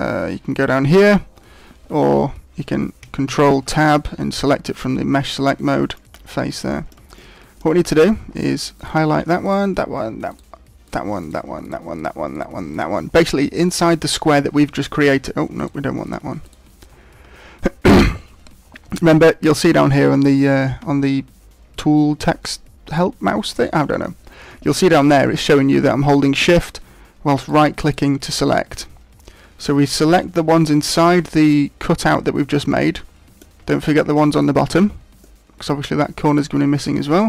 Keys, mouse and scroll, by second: 0.9 click, 3.2 ctrl+Tab, 6.7 shift+middle click, 7.1 middle click, 7.8 middle click, 8.8 right click, 9.4 shift+right click, 10.4 right click, 11.0 right click, 11.2 shift+right click, 11.6 right click, 12.0 shift+right click, 12.4 shift+right click, 12.8 shift+right click, 15.6 shift+right click, 16.0 shift+right click, 16.4 shift+right click, 27.4 shift+right click, 28.0 shift+right click, 32.7 middle click, 33.8 shift+right click, 34.3 shift+right click, 35.2 middle click.